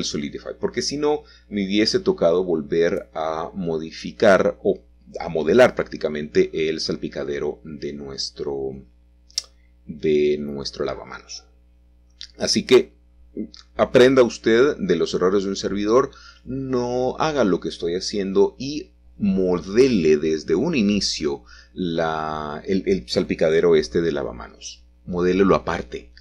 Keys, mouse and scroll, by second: 0.0-1.7 scroll down 3, 0.7 middle click, 4.7 middle click, 6.2 alt+h, 7.1 middle click, 7.1-9.0 scroll down 2, 7.6-9.0 middle drag, 9.2 click, 10.0-14.1 middle drag, 13.6 scroll up 2, 13.9 scroll down 2, 14.0 scroll up 2, 14.6 click, 15.2-16.9 shift+drag, 18.7 g, 19.8 shift+z, 21.8-22.9 drag, 23.6 r, 24.5 z, 25.0 4, 25.1 5.